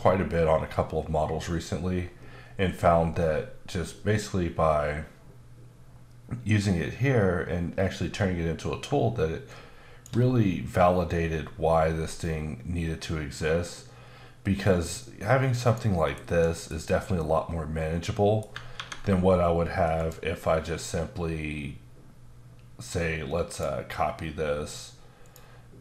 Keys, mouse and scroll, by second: 9.5 shift+click, 11.1-14.1 scroll up 5, 14.1 scroll up 1, 15.6 click, 16.0 middle click, 16.1 ctrl+shift+b, 17.2 middle click, 20.0 click, 23.5 click, 25.2 click.